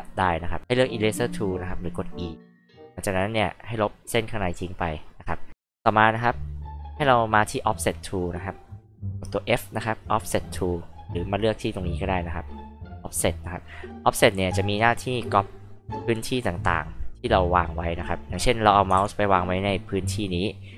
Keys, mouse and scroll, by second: 2.6 click, 3.4 click, 4.0 click, 4.5 click, 5.0 click, 5.4 click, 9.0 f, 9.9 click, 13.6 click, 14.9-17.9 drag, 19.0 ctrl+z.